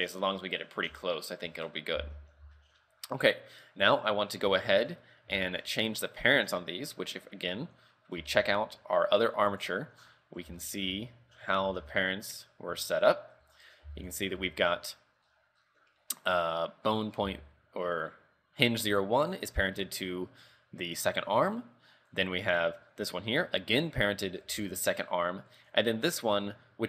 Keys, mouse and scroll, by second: 0.4-1.0 scroll down 4, 1.0 a, 1.3-1.6 scroll down 2, 1.6-2.5 scroll up 7, 2.0 z, 2.7 shift+middle click, 3.3 right click, 4.7 shift+middle click, 5.5 shift+middle click, 8.3 Tab, 9.3 click, 9.6 click, 10.0-10.6 scroll down 10, 10.7 shift+middle click, 11.0-11.7 scroll up 3, 11.7 alt+h, 12.4 right click, 13.2 shift+middle click, 13.5-14.0 scroll up 7, 14.0 z, 14.2 right click, 14.6 shift+middle click, 15.4-15.9 scroll up 6, 15.9 scroll down 1, 16.0 scroll down 2, 17.3 z, 22.2 right click, 25.6 right click, 26.6-26.8 scroll down 3.